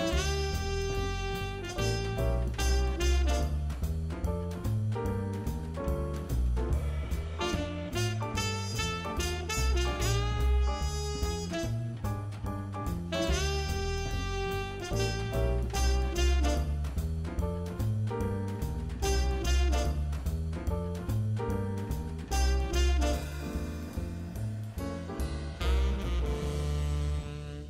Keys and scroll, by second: 0.9 super+z, 1.5 super+z, 5.5 super+z, 6.5 super+z, 7.5 super+z, 8.2 super+z, 8.4 super+z, 8.5 super+z, 8.6 super+z, 9.2-11.3 typing, 14.2 super+z, 14.8 super+z, 15.7 super+z, 19.0 super+z, 19.7-23.9 typing, 20.8 super+c, 25.3 super+z, 26.3 2.